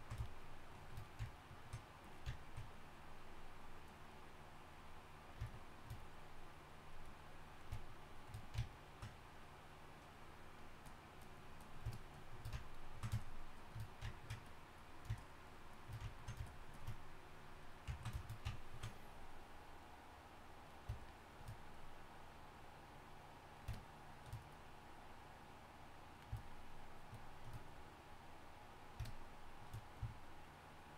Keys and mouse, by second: 8.5-30.9 drag.